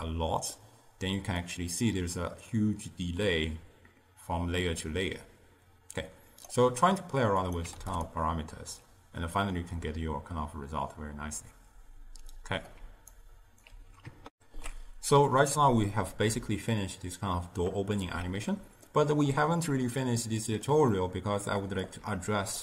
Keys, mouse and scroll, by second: 1.5-4.6 drag, 7.5 click, 9.5-12.5 drag, 12.9 d, 13.3 right click, 13.8 d, 14.4 ctrl+alt+shift+q, 18.1-21.9 middle drag, 21.9 click.